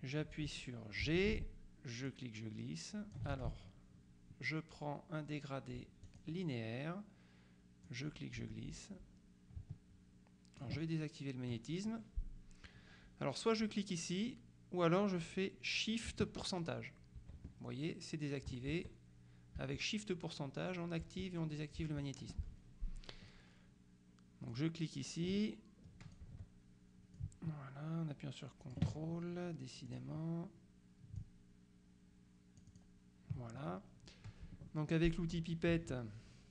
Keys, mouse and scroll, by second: 1.1 g, 2.1-3.7 drag, 3.4 ctrl+z, 6.1 click, 7.9-11.1 drag, 24.6 click, 25.4 ctrl+click, 26.3 ctrl+z, 27.3-29.3 drag, 29.9 click, 31.3-33.3 ctrl+drag.